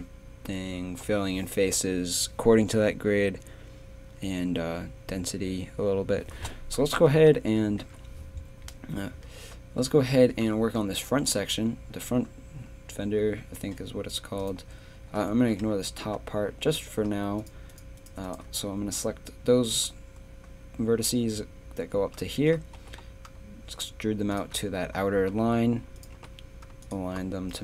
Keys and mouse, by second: 14.4-19.0 drag, 22.4 click, 22.8 e, 26.1 g.